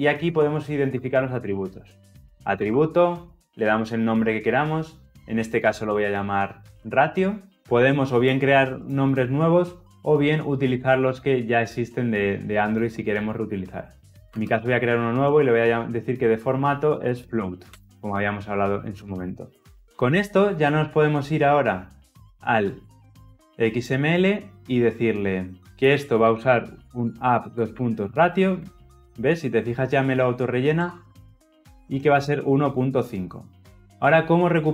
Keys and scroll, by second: 2.5 Return, 7.5 ctrl+z, 15.0 Return, 19.7 ctrl+alt+l, 20.4 ctrl+alt+o, 30.4 Return.